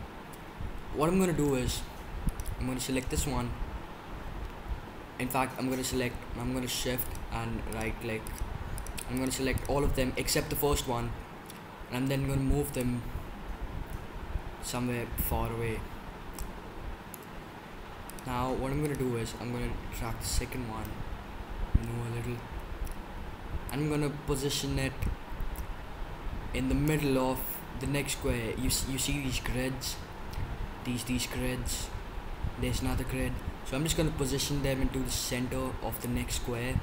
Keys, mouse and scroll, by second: 0.0-2.2 middle drag, 2.2-4.0 right drag, 5.0-7.0 middle drag, 7.0-11.4 right drag, 12.8-14.5 drag, 18.0-20.4 right drag, 20.4-23.6 middle drag, 23.6-25.5 drag, 33.7-35.0 middle drag, 35.0-36.8 drag, 36.0-36.8 right drag.